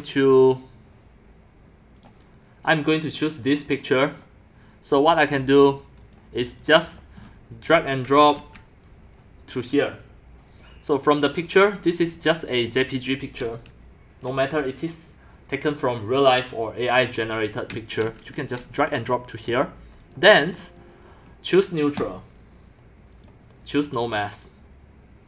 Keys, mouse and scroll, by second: 2.0 middle click, 3.6-5.4 drag, 5.4 click, 6.1 click, 7.0 click, 7.2 scroll, 7.3-8.3 middle drag, 8.3 scroll, 12.0-13.2 drag, 17.9 click, 18.7-19.3 drag, 22.0 click, 23.1 click, 24.0 click.